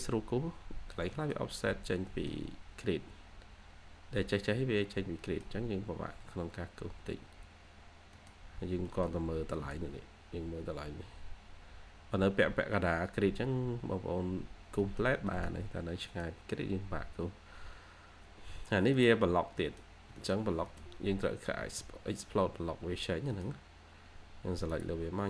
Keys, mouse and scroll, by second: 0.2 2, 0.9 scroll up 1, 1.0 middle click, 1.7-2.0 scroll down 1, 2.0 middle click, 2.4 scroll down 1, 2.6-3.1 scroll up 1, 4.6-5.1 scroll down 1, 5.1 middle click, 5.7-6.1 scroll up 1, 6.4 scroll down 1, 7.2-7.6 scroll up 1, 7.8 scroll down 1, 8.0 middle click, 8.4-8.8 scroll down 1, 8.8 middle click, 9.4 scroll down 1, 9.5 middle click, 9.9 scroll up 1, 12.8-13.6 scroll down 1, 13.6 scroll up 1, 14.1-14.7 scroll down 1, 14.8 middle click, 15.7-16.0 scroll down 1, 16.0 middle click, 16.5-17.3 scroll up 1, 19.2 scroll down 1, 19.5 middle click, 20.7-21.5 scroll down 1, 21.5 Escape, 22.8 scroll up 1, 23.2 middle click.